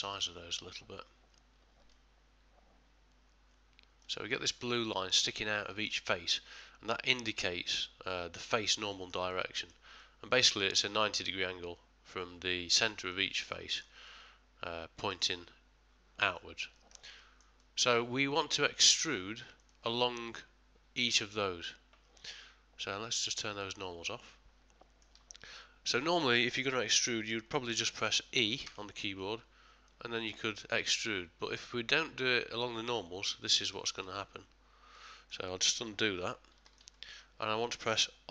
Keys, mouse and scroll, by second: 0.0 click, 4.8 middle click, 5.2 middle click, 5.3 ctrl+middle click, 6.4 middle click, 8.9 ctrl+middle click, 9.0 ctrl+middle click, 9.3 middle click, 10.0 middle click, 13.4 middle click, 13.5 ctrl+middle click, 14.1 middle click, 16.7 ctrl+middle click, 17.2 shift+middle click, 17.6 middle click, 17.8 middle click, 19.6 click, 24.3 middle click, 24.7 middle click, 25.6 middle click, 27.2 middle click, 28.6 e, 34.9 middle click, 36.0 ctrl+z, 36.6 ctrl+middle click, 36.9 shift+middle click, 37.4 middle click.